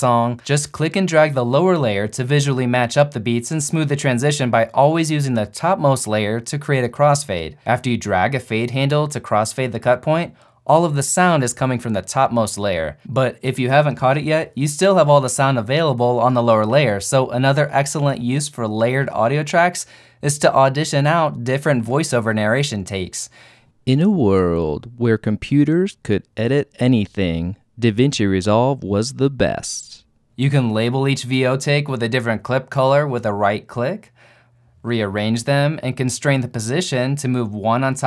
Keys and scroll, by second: 23.6 shift+space.